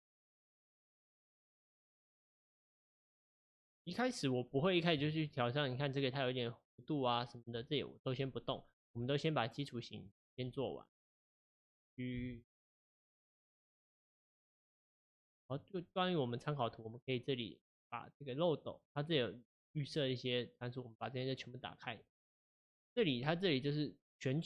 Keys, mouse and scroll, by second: 1.7 Tab, 9.0 Tab, 11.5 click, 12.2 g, 13.4 right click, 14.3 click, 14.6 ctrl+z, 15.1 ctrl+z, 15.5 click, 18.7-21.8 drag.